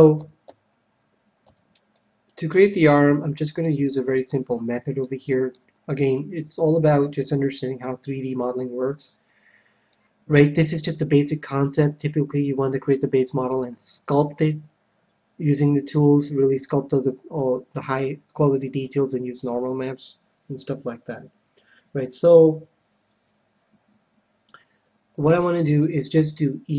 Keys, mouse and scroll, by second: 0.1 a, 0.4 a, 1.4 c, 2.8-4.5 right drag, 3.6-6.5 middle drag, 8.9 scroll down 1, 9.1-11.9 middle drag, 26.1 e.